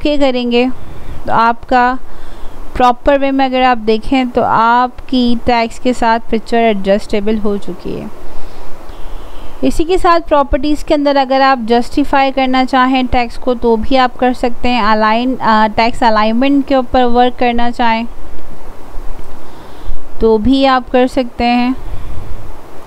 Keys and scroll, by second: 6.8 ctrl+a.